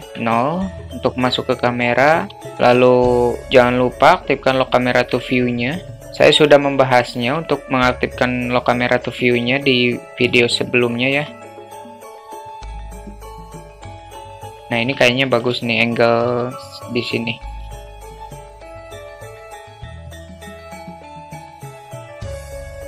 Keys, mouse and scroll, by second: 2.3 ctrl+alt+q, 5.2-6.0 alt+shift+middle drag, 6.0 q, 7.3 q, 10.8 shift+middle click, 12.7 q, 13.1-13.6 middle drag, 13.7 middle click, 14.5 shift+middle click, 15.6 alt+shift+middle click, 16.2 q, 17.7 shift+middle drag, 18.0 drag, 18.2 click, 19.5 click, 20.0 click, 20.5 alt+shift+middle click, 21.6 click, 22.0 shift+middle click, 22.3 click.